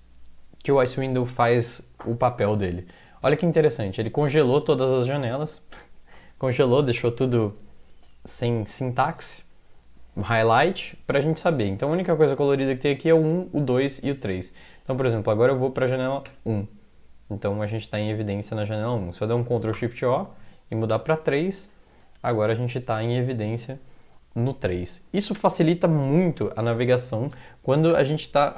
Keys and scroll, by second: 16.3 1, 19.5 ctrl+x, 19.7 o, 20.9 3, 27.9 ctrl+\.